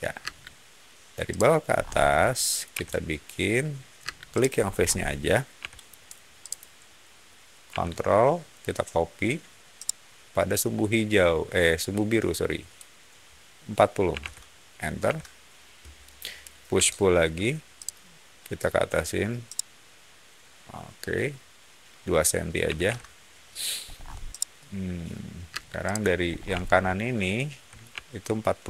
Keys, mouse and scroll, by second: 0.1 space, 1.2 click, 1.6 scroll up 1, 2.6 m, 3.9 space, 4.3 click, 4.5 scroll up 1, 5.5 m, 6.3 click, 9.7 ctrl+middle click, 13.8-14.6 typing, 15.0 Return, 16.6 p, 17.7 click, 19.4-21.0 middle drag, 22.6 2, 22.8 Return, 23.8 scroll down 1, 24.2 middle click, 25.4 space, 25.7 click, 26.2 scroll down 1, 26.5-27.7 shift+middle drag, 28.0-28.6 shift+middle drag.